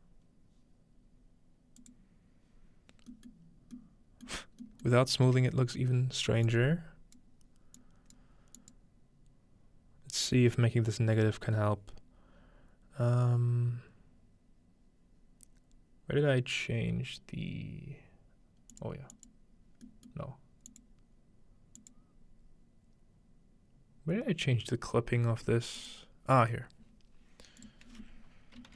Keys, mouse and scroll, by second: 1.8-3.6 drag, 3.6 middle click, 4.6 middle click, 4.6-6.5 scroll up 1, 5.0-6.5 middle drag, 6.5-9.8 drag, 18.7-19.9 drag, 19.9 middle click, 20.0 click, 21.8 click, 25.8 click, 27.6 click.